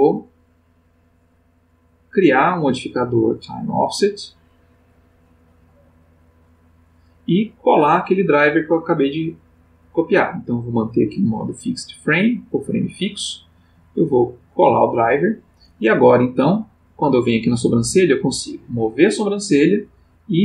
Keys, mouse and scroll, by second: 0.1 click, 1.9 click, 2.5 click, 3.4 click, 4.5 right click, 6.3 click, 8.6 click, 11.0 click, 12.1 right click, 14.9 click, 16.6 click, 17.5 g, 19.2 click, 20.1-20.4 drag.